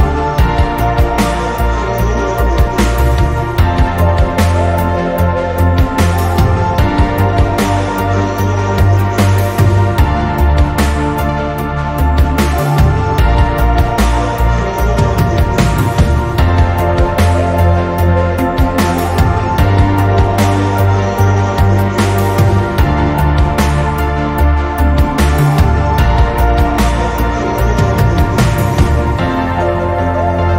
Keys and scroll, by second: 22.8 x.